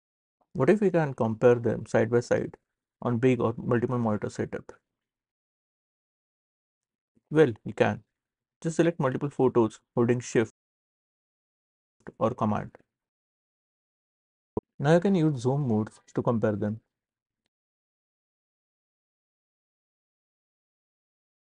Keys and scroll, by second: 17.0 c, 19.7 space, 20.8 q.